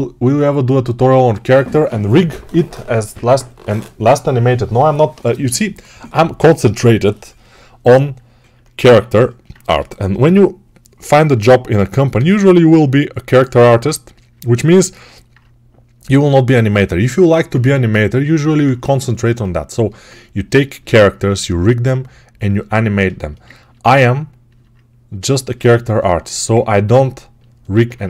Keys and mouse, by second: 8.7 alt+q, 9.5-12.6 drag, 9.5 g, 9.9 ], 10.1 ], 12.6-15.2 right drag, 15.2 click, 16.0 alt+right click, 16.1-22.9 alt+drag, 22.9-25.7 alt+shift+right drag, 25.7-28.0 alt+drag, 27.6 alt+q.